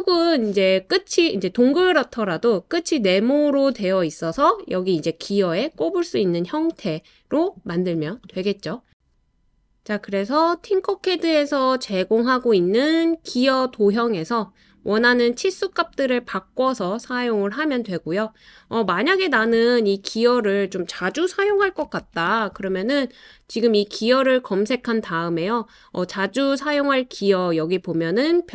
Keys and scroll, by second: 21.2-22.5 typing.